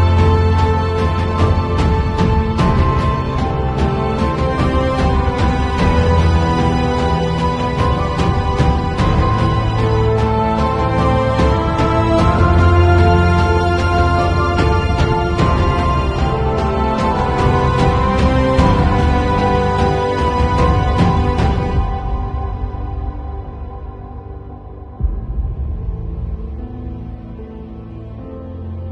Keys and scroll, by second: 9.5 v, 20.7 space, 23.5 b, 27.1 ], 28.7 0.